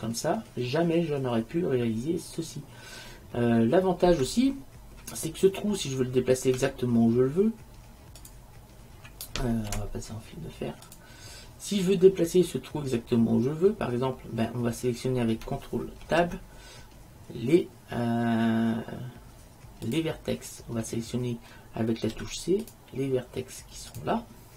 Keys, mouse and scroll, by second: 6.6 Tab, 9.8 z, 16.1 ctrl+Tab, 22.2 c.